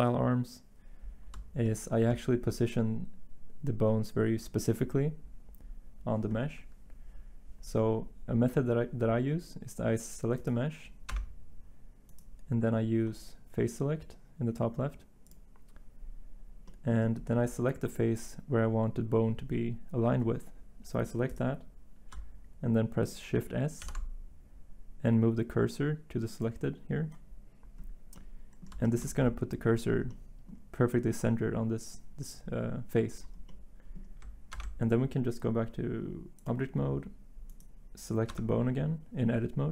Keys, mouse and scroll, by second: 11.1 Tab, 16.8 Tab, 27.9 s, 34.5 ctrl+Tab, 38.3 Tab.